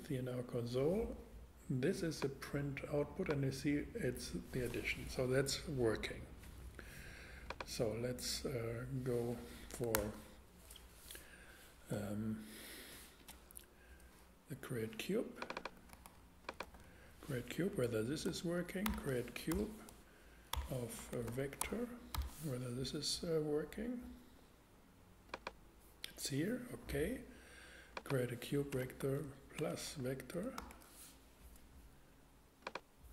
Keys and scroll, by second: 9.7 Return, 15.9 super+c, 16.6 super+v, 17.7 alt+super+v, 18.9 alt+shift+5, 19.5-22.1 typing, 28.7-30.6 typing.